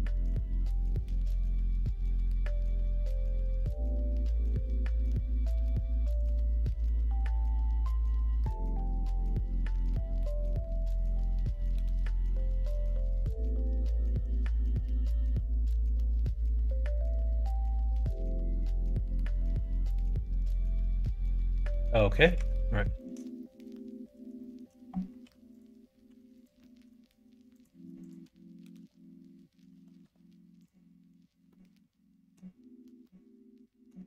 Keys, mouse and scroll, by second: 1.4 shift+click, 2.1 m, 3.4 middle click, 4.1 middle click, 5.1 shift+middle click, 6.2 click, 7.5 g, 9.6 click, 9.7 g, 13.2 click, 13.9 middle click, 15.3 middle click, 15.5 Tab, 16.0 click, 16.3 middle click, 17.6 middle click, 18.0 middle click, 18.2 middle click, 18.8 shift+middle click, 19.4-20.8 middle drag, 21.3 click, 21.5 middle click, 22.3 Tab, 22.7 middle click, 23.3 shift+middle click, 24.3 middle click, 25.2 2, 25.4 click, 26.0 1, 26.3 click, 26.5 middle click, 27.5 click, 28.0 shift+click, 28.7 n, 29.7 n, 29.9 m, 31.4 middle click, 33.0 middle click.